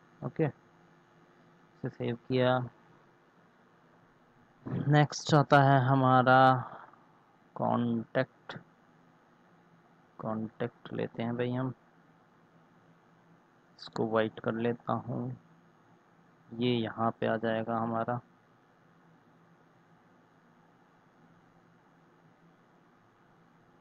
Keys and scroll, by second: 1.5 ctrl+s, 8.0 ctrl+c, 11.4 ctrl+v, 17.5 ctrl+z, 18.3 ctrl+z.